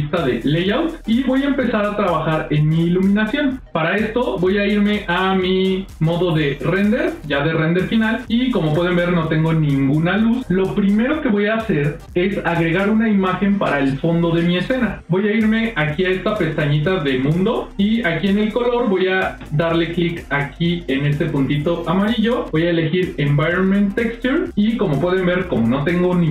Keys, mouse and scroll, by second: 0.8 middle click, 1.2-1.6 scroll down 1, 1.7 ctrl+scroll up 1, 1.8 ctrl+middle click, 2.4 middle click, 6.5 click, 8.0 middle click, 14.9 click, 17.3-23.7 drag.